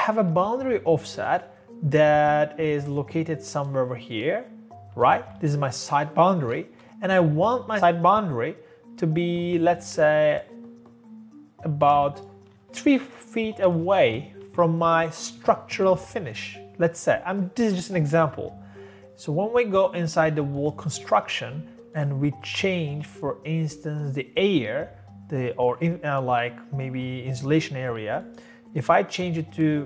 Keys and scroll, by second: 0.0-0.2 typing, 5.2 Escape, 5.4 Escape, 6.5-7.3 typing, 9.9 Tab, 12.5 Escape, 12.7 Escape, 13.9 3, 14.3 Escape, 14.5 Escape.